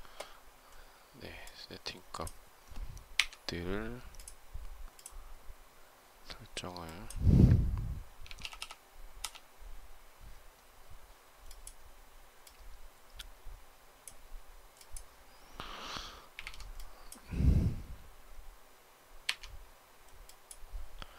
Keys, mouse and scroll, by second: 9.1 typing.